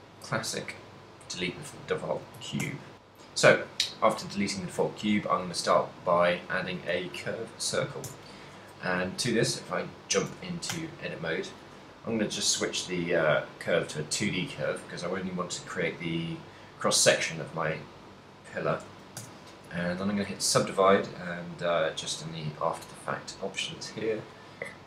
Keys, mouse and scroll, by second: 2.6 shift+c, 5.5 shift+a, 8.1 Tab, 10.7 w, 14.1 click, 19.1 w, 24.3 click.